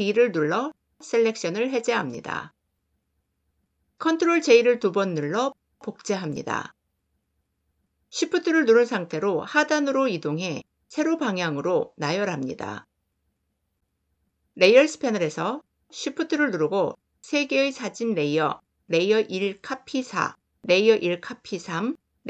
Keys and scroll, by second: 4.0 ctrl+j.